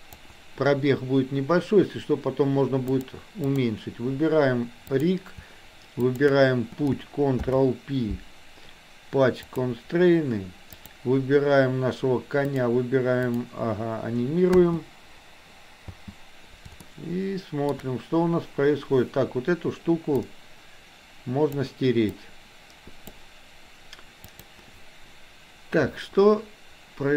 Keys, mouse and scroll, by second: 2.8 click, 4.8 click, 6.0 shift+click, 7.3 ctrl+p, 10.7 click, 13.3 click, 14.6 space, 17.0-17.7 shift+middle drag, 20.3-21.6 drag, 22.1-23.1 drag, 24.3 click.